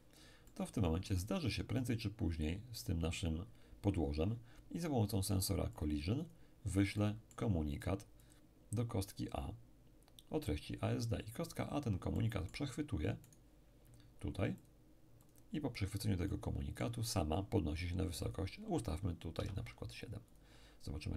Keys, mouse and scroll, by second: 0.5-2.0 middle drag, 5.7-9.3 drag, 6.9-9.3 middle drag, 11.7-14.3 drag, 12.1-14.3 middle drag, 13.3 right click, 14.6-17.8 drag, 16.3-17.8 middle drag, 18.3 click, 19.3 7, 20.3 click.